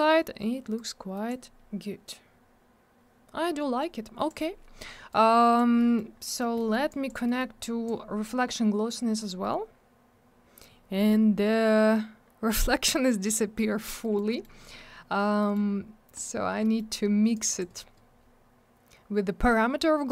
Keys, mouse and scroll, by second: 0.7 click, 1.7-2.1 scroll down 1, 3.8 click, 5.1 click, 5.7 middle click, 5.9 middle click, 6.2 middle click, 6.4 double middle click, 6.5 middle click, 6.7 middle click, 6.9 click, 7.0 double click, 7.2 middle click, 7.3 middle click, 7.8 click, 10.9-11.8 scroll up 1, 12.2-13.6 scroll down 1, 14.0 middle click, 14.1 middle click, 14.3 middle click, 14.4 double middle click, 15.4 middle click, 15.5-16.1 scroll down 1, 16.1 click, 16.2 click, 16.6 middle click, 16.7 middle click, 17.3 click, 17.4 click, 17.5 click, 17.6 click.